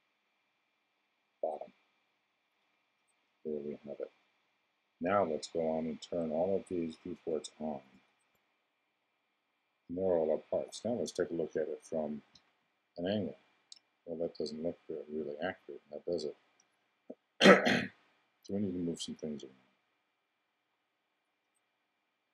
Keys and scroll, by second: 12.3 i.